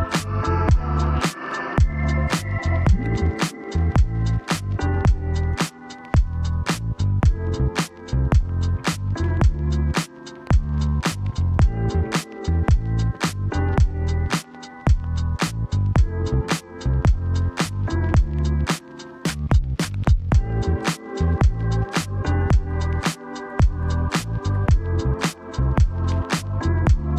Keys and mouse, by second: 0.5 click, 5.6 g, 6.7 click, 8.3 e, 9.7 shift+middle click, 11.2 click, 13.3 ctrl+Tab, 15.9 g, 16.3 x, 20.6 g, 21.0 x, 21.8 ctrl+click, 22.4 Tab, 23.3 Tab, 23.5 shift+middle click, 23.9 Tab, 25.1 click, 25.3 Tab, 26.2-27.1 middle drag.